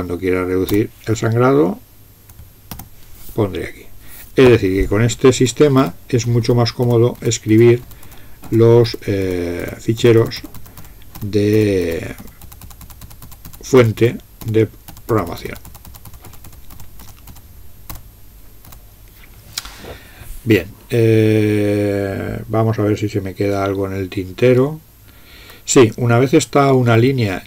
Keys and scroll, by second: 0.8 BackSpace, 2.8 }, 5.5-18.7 typing, 27.0 Down.